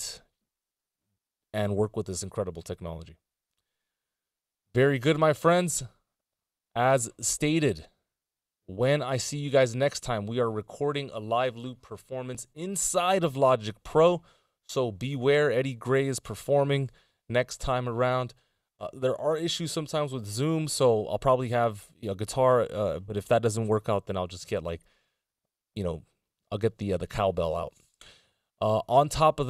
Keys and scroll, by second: 1.3 super+s.